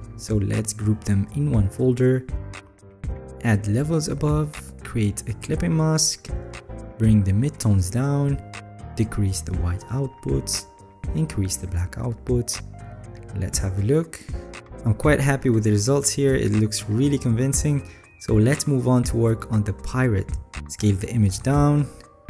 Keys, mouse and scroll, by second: 14.1-14.5 alt+scroll, 14.9-16.1 alt+scroll, 16.9 ctrl+s.